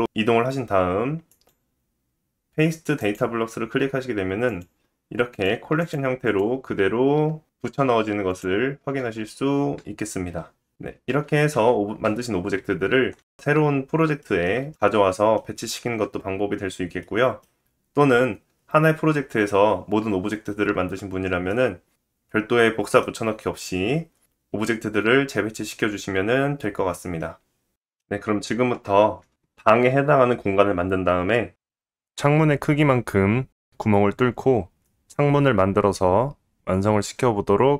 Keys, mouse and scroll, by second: 1.3-4.4 right drag, 4.5 click, 5.3 click, 5.8 click, 6.2 click, 8.4 shift+click, 10.3 g, 11.5 ctrl+z, 12.6 ctrl+z, 13.6 middle click, 14.3-14.7 scroll up 3, 14.7 shift+middle click, 16.4 middle click, 18.6 middle click, 18.9-19.5 scroll up 3, 19.9-21.2 scroll down 2, 27.9-37.7 middle drag.